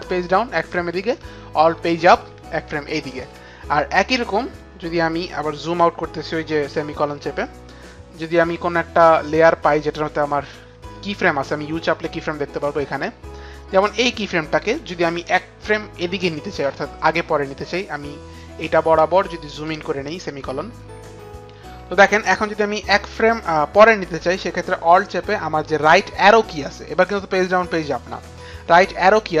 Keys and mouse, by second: 0.0 alt+Page_Down, 1.8 alt+Page_Up, 2.1 alt+Page_Up, 11.6 u, 14.2 click, 18.4 click.